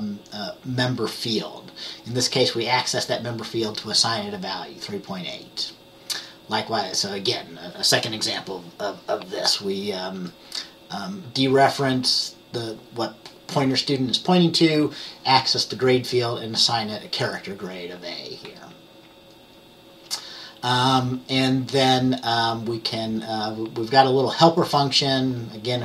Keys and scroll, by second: 10.3 F10, 18.6 F10.